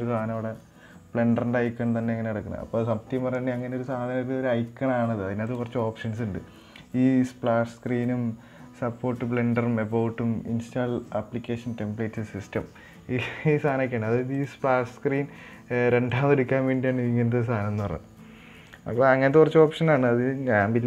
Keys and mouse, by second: 6.0-13.2 drag, 14.7-19.1 drag.